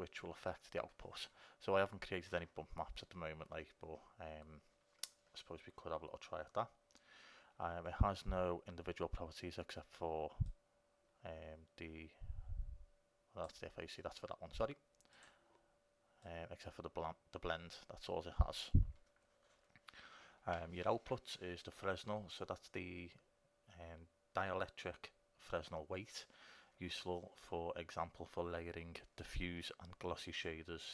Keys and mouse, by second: 10.7-12.6 drag, 15.3-20.3 drag.